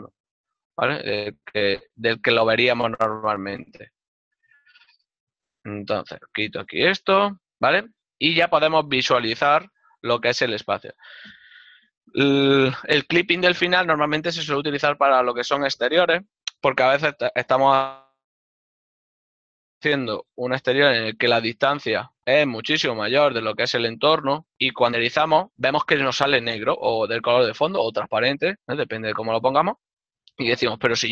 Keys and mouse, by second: 8.6 middle click, 21.6 ctrl+middle click.